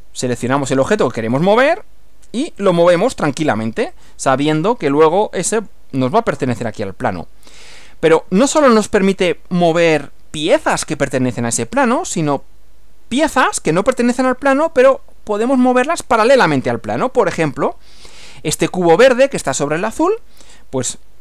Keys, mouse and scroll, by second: 0.3 click, 1.3 click, 2.7 click, 3.9 click, 4.7-5.9 middle drag, 6.7-8.3 middle drag, 12.5-13.7 middle drag, 19.1 scroll up 1.